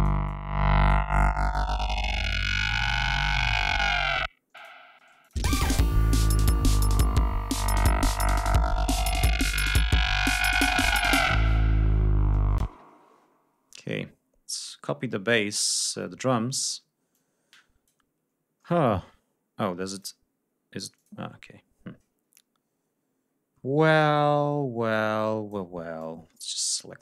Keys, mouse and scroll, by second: 2.3 click, 3.1 scroll up 2, 4.1 click, 4.6 space, 4.7 click, 5.2 ctrl+scroll down 2, 5.7 ctrl+scroll up 2, 11.6-11.9 scroll down 2, 12.2 space, 12.3-13.7 scroll up 4, 14.0 scroll down 2, 14.8 ctrl+scroll up 2, 16.6 click, 18.2 scroll down 2, 19.5 click, 20.5 click, 20.8 scroll down 2, 23.5-24.0 drag, 24.0 scroll up 2, 24.3-24.7 scroll down 2, 25.5-26.2 drag, 26.2-26.7 scroll up 2.